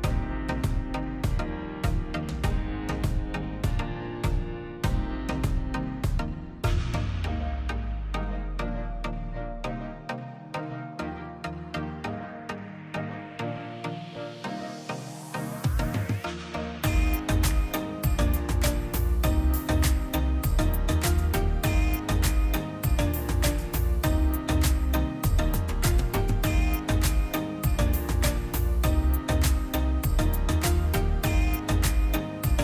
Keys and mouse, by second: 0.2 click, 1.2 middle drag, 1.6 middle drag, 1.8-2.6 drag, 2.8-3.5 drag, 3.7 middle click, 4.7 middle click, 5.0-6.6 drag, 7.2-7.8 middle drag, 7.8-8.5 drag, 9.7 click, 11.0-12.4 drag, 13.5-14.6 middle drag, 14.7-15.1 middle drag, 15.1-15.9 drag, 16.7 click, 17.2 m, 17.5 m, 18.0 m, 18.3 m, 19.0 middle click, 20.3-20.7 middle drag, 20.7 click, 21.2 middle click, 21.7 click, 22.1 middle click, 22.4 click, 22.6 shift+a, 24.3 click, 24.5 shift+a, 26.3 middle click, 26.6 drag, 27.4 click, 28.8 click, 29.4 click, 30.9 middle click, 31.4 click, 32.2 middle click, 32.4 ctrl+shift+click.